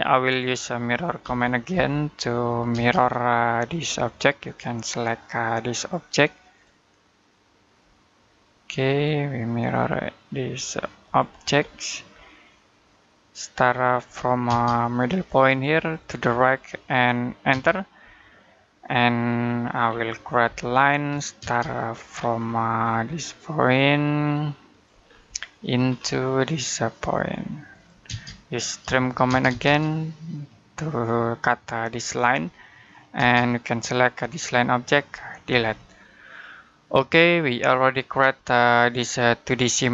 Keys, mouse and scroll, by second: 0.0 middle click, 1.1-2.6 typing, 3.5-4.3 scroll up 1, 4.3 click, 11.4-12.2 scroll down 1, 12.2 middle click, 13.7 click, 14.3 space, 15.6 click, 17.3 space, 18.7-19.2 scroll down 1, 19.2 middle click, 19.7-20.3 scroll up 1, 20.3 l, 21.9-22.3 scroll down 1, 22.3 middle click, 22.6-23.7 scroll up 1, 24.5 click, 24.9-25.2 scroll down 1, 25.2 middle click, 25.3 scroll up 1, 27.5 click, 27.9-29.1 typing, 31.8 click, 32.2-32.5 scroll down 1, 32.5 middle click, 33.0 space, 33.3 click, 35.3 Delete, 37.2-37.7 scroll down 1, 37.7 middle click, 38.9-39.7 scroll down 1.